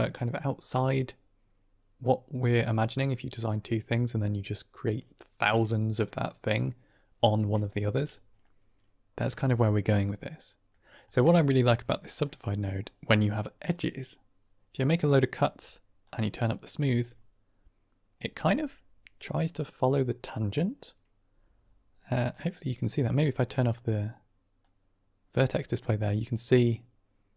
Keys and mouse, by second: 8.3-10.6 middle drag, 11.2 shift+middle drag, 12.2 middle click, 15.9-17.0 drag, 22.3-23.5 drag, 24.5-27.3 drag.